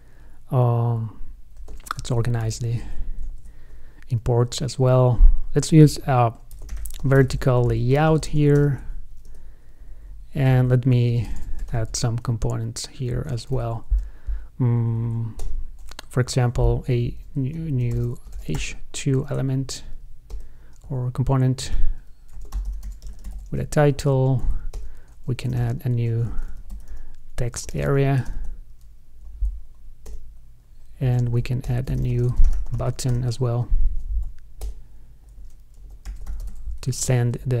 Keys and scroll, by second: 2.2 shift+super+o, 2.6 super+Right, 3.5 alt+shift+Left, 8.8 ctrl+space, 10.8 shift+super+Left, 19.4 ctrl+space, 28.6 ctrl+space, 33.4 ctrl+space, 37.2 super+Right.